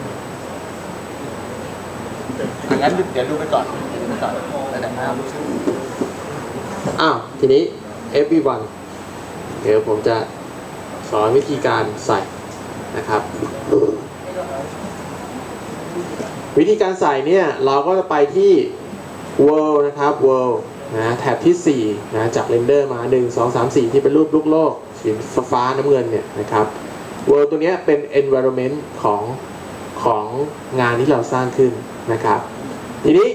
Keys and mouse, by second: 27.2-29.0 drag.